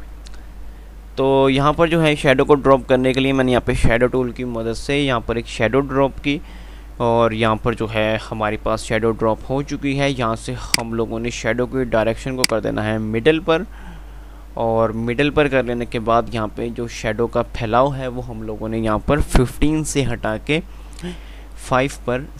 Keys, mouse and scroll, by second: 11.2 click, 11.2 typing.